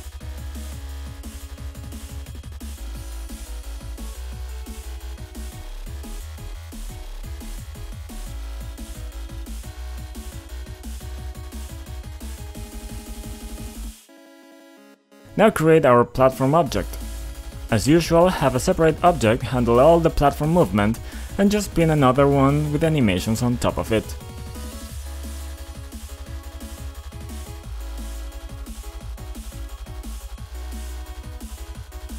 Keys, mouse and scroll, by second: 0.8 click, 3.7 ctrl+click, 4.8 click, 7.0 click, 8.6 click, 8.8-9.1 ctrl+scroll up 1, 9.1-9.4 scroll down 2, 9.9 ctrl+0, 10.8 click, 12.0 click, 12.6 right click, 12.9 click, 13.5 click, 13.6 scroll down 2, 14.1 click, 14.1-14.5 scroll up 1, 14.5 click, 15.4-17.8 typing, 18.2 Return, 19.0 click, 19.9-20.7 typing, 21.3 click, 21.8 click, 22.0-22.8 typing, 23.4 click, 24.1 click, 24.5-25.7 typing, 26.8 click, 27.0 click, 27.8 2, 29.3 right click, 30.0 click, 31.7 click.